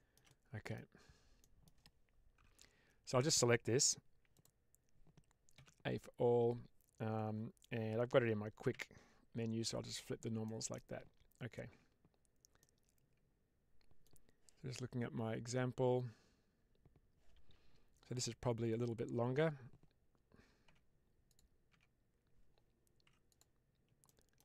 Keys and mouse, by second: 0.2 middle click, 1.3 middle click, 2.3 3, 4.2 click, 5.4 a, 8.6 q, 10.4 middle click, 11.6 Tab, 12.5-13.9 middle drag, 18.0 click, 18.5 Tab, 20.5 Tab, 22.9 2, 23.2 click, 23.9 middle click.